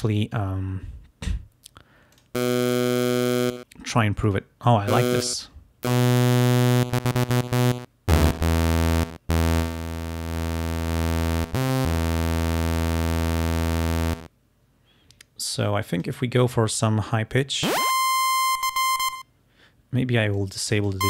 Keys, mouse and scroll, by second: 2.2 click, 4.3 click, 5.3-6.5 drag, 9.7-11.5 drag, 16.0-19.4 drag, 20.5 click.